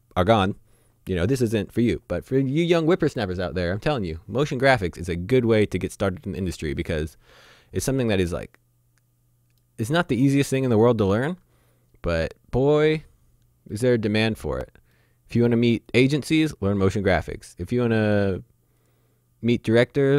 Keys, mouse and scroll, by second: 6.0 middle click, 7.0-7.3 scroll down 1, 7.5 shift+middle click, 8.4 middle click, 9.8 scroll up 1, 10.8 shift+middle click, 13.4-13.7 scroll down 1, 13.7 middle click, 14.4-15.0 scroll down 1, 15.0 middle click, 15.9 click.